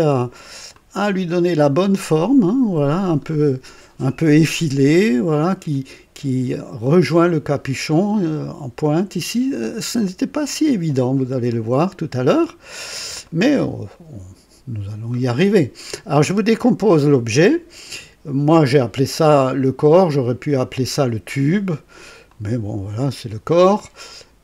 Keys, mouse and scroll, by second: 0.7-2.3 drag, 2.5 click, 3.3 right click, 4.9-5.9 drag, 9.9-10.6 drag, 11.5 click, 12.3-13.0 scroll down 4, 13.2-15.0 right drag, 19.9-20.8 drag, 22.2 click.